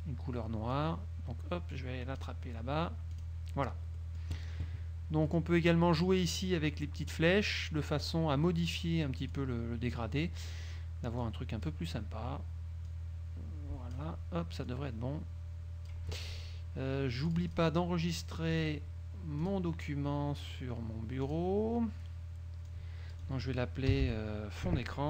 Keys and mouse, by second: 0.8-2.5 drag, 3.3 click, 4.1 click, 5.4 click, 7.2 click, 9.4 click, 11.4 click, 13.0-14.3 drag, 14.8-16.3 drag, 17.4 click, 18.7 click, 19.6 click, 21.4 click, 22.8 click, 24.1-25.0 typing.